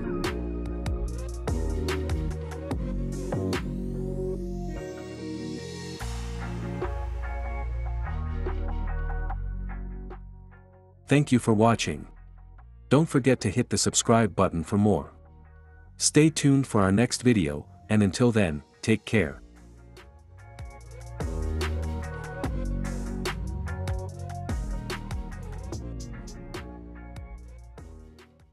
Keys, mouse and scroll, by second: 0.0 space, 1.2-2.2 drag, 2.9-4.0 drag, 5.5 click, 7.2-9.2 drag, 10.5-12.4 drag, 13.9-15.0 drag.